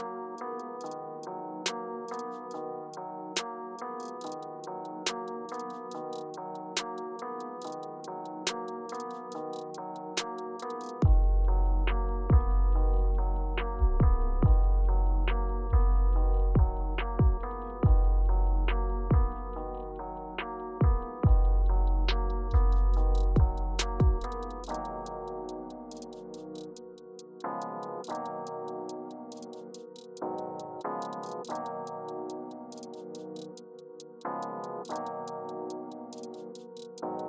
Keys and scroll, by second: 2.5 Return, 4.5 Down, 5.0 Down, 6.0 Up, 11.0 Down, 11.8 Return, 13.0 Return, 17.5 Return, 18.5 Right, 20.4 Right, 23.5 Return, 30.2 Right, 32.2 Left, 35.9 Down, 37.1 Up.